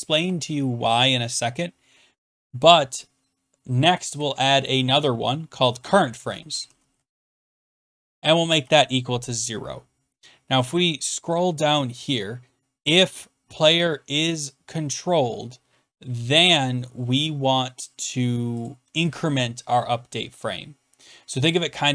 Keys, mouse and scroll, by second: 3.9-4.8 typing, 5.9-8.6 typing, 10.4 click, 10.5 click, 10.6-11.2 scroll, 10.6 f, 11.8 click, 13.2 click, 13.3-13.6 scroll, 14.4-15.7 scroll, 18.1-18.4 scroll down 4, 18.6 click.